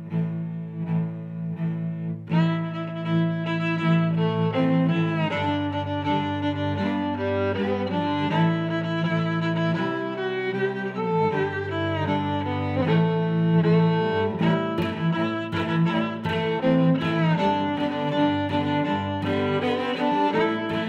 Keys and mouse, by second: 0.6 click, 1.3 click, 1.8 g, 2.0 y, 2.6 click, 3.2 click, 4.2 s, 5.1 click, 5.4 middle click, 7.5 click, 8.3 g, 8.6 y, 9.9 click, 11.7 click, 12.6 click, 14.7 g, 14.9 x, 17.1 click, 17.4 middle click, 18.7 a, 19.4 click, 19.7 click, 20.5 a.